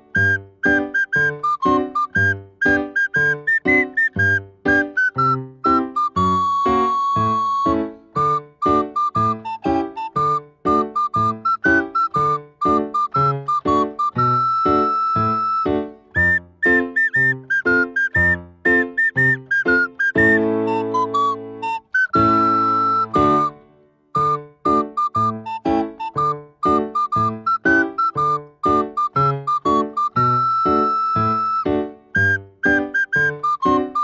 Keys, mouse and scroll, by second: 0.5 g, 1.7 ctrl+a, 3.2-4.6 middle drag, 4.6 Tab, 5.5 3, 5.8 click, 6.2-7.0 scroll up 1, 7.0 s, 9.1-11.1 middle drag, 11.5 a, 12.9-15.8 drag, 15.8 a, 17.2 2, 18.0 ctrl+b, 23.8 click, 24.2-26.5 middle drag, 26.5 Tab, 27.0-28.3 middle drag, 28.3 click, 28.9 click, 30.6-32.0 drag, 32.4 click.